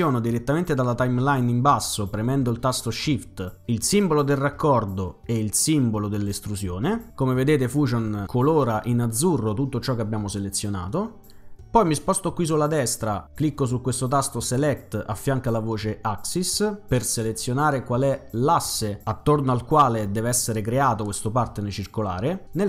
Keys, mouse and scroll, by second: 3.9 click, 6.2 click, 14.5 click.